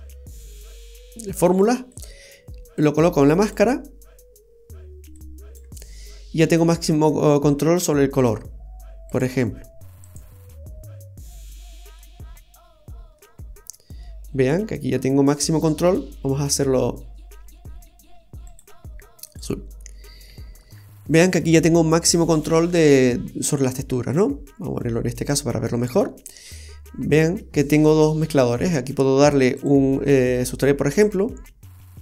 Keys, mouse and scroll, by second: 1.9 click, 3.2 click, 5.1 click, 5.2 typing, 9.1 click, 11.4 middle click, 12.2 scroll up 2, 12.7-14.0 scroll up 5, 13.1 middle click, 14.0-14.3 scroll up 1, 14.5-14.9 scroll down 2, 14.6-14.9 scroll up 1, 14.9 scroll down 1, 18.4 click, 19.9-20.2 scroll down 2, 20.2 shift+middle click, 20.7-21.2 scroll up 3, 22.0 middle click, 22.6-23.4 scroll down 1, 23.4-24.0 scroll down 1, 25.2 click, 25.7-26.0 scroll up 2, 26.0 middle click, 29.5 click.